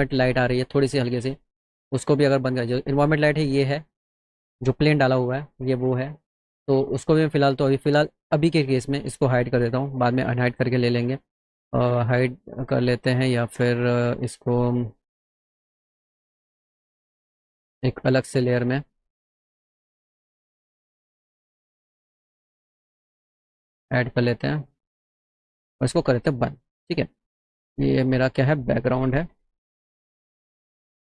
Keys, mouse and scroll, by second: 1.7 click, 2.9 click, 8.1 right click, 13.3 click, 17.0 click, 18.5 click, 20.7 click, 21.2 click, 22.2 click, 23.5 click, 27.4 click, 28.8-30.5 typing.